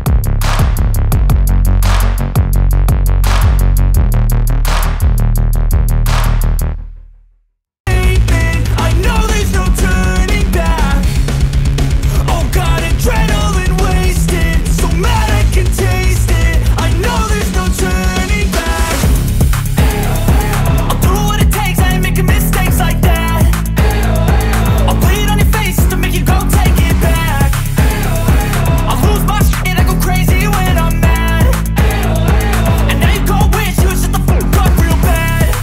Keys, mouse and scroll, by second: 0.4-7.5 drag, 8.0 click, 10.2 ctrl+scroll down 1, 12.5 alt+scroll down 1, 15.1 click, 20.9 alt+scroll down 1, 23.3-29.0 drag, 30.5-35.6 drag.